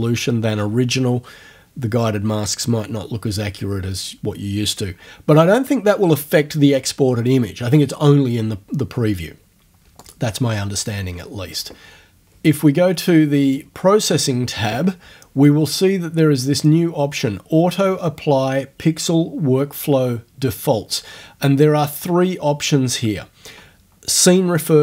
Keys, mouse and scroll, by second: 10.0 click, 13.5 click, 21.9 click.